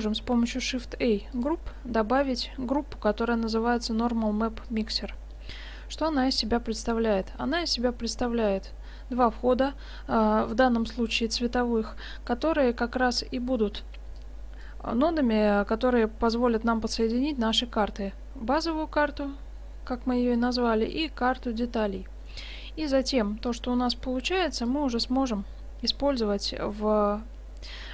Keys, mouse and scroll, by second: 0.2 shift+a, 7.0-9.4 middle drag, 14.2-16.0 drag, 21.8-22.5 scroll down 1, 22.5-23.1 middle drag, 23.5-25.4 drag.